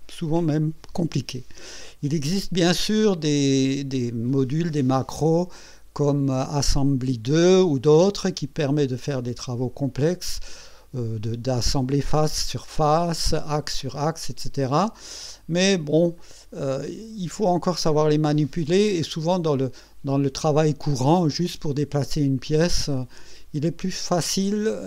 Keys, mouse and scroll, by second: 16.2-17.4 drag, 17.5 click.